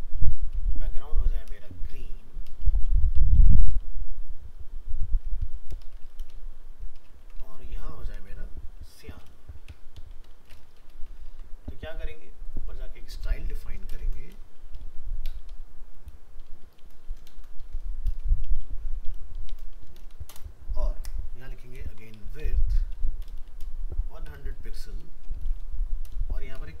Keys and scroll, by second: 6.2 ctrl+c, 7.2 ctrl+v, 11.3 ctrl+s.